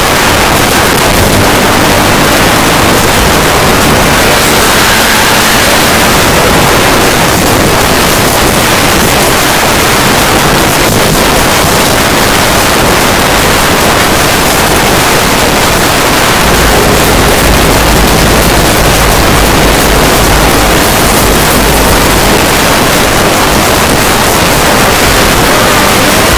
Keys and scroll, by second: 7.1 Page_Down, 22.4 Page_Down.